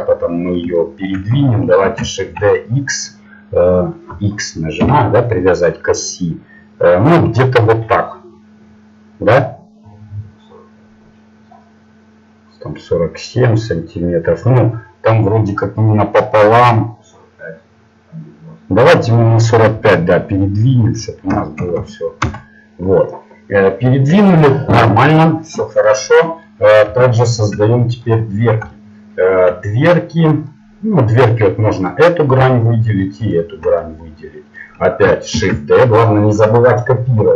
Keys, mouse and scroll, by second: 1.8 shift+d, 24.0-29.4 middle drag, 31.7-35.3 right drag, 33.8-35.3 middle drag, 35.3 shift+d.